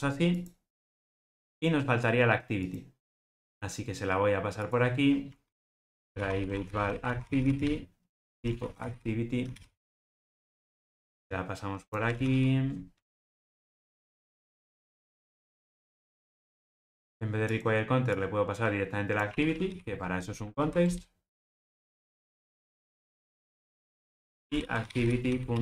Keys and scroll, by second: 10.1 Return, 13.2 Return, 20.8 Return.